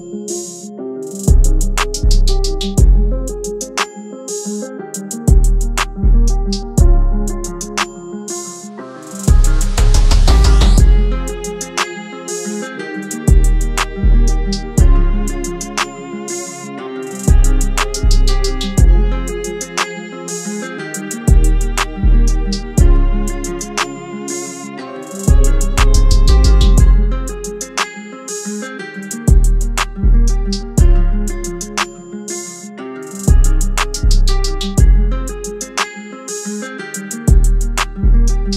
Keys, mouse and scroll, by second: 6.6 typing, 11.3-12.0 typing, 13.6 alt+shift+click, 17.8 Return.